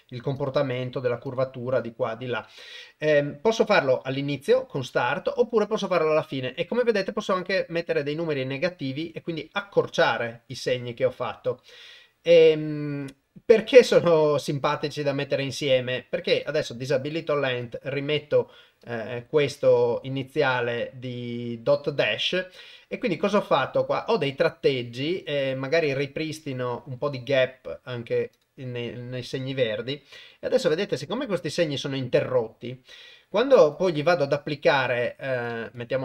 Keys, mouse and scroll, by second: 0.3 click, 0.7 click, 1.2 click, 5.1-11.5 drag, 13.9 click, 16.4 click, 17.6 click, 18.8 click, 20.9-22.1 drag, 25.4 click, 28.4 click, 33.7 click, 35.5 click.